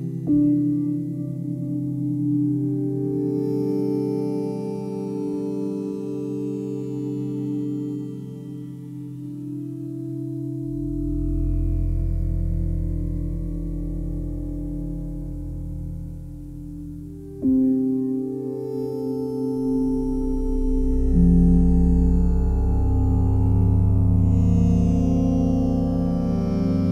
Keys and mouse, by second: 0.3 typing, 1.1 click, 1.6 click, 2.6 click, 3.8 typing, 4.9 click, 5.6 alt+click, 7.9 typing, 10.3 click, 11.0 alt+click, 11.5-14.3 alt+shift+drag, 19.2 s, 20.1 click, 21.2 click, 22.1 click, 24.2 typing, 25.5 typing, 26.4 click.